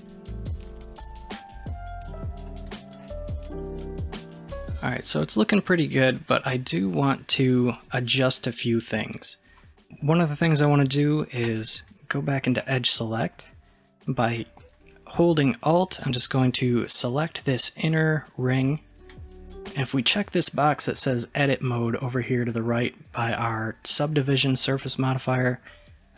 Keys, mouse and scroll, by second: 0.0-0.3 scroll down 1, 0.3-2.0 middle drag, 2.0 click, 2.5-3.0 middle drag, 3.0-3.5 scroll up 1, 3.5 scroll up 1, 3.8 middle click, 4.7-9.2 middle drag, 11.5 2, 12.8-15.9 middle drag, 16.0 alt+click, 16.1 middle click, 25.4 click.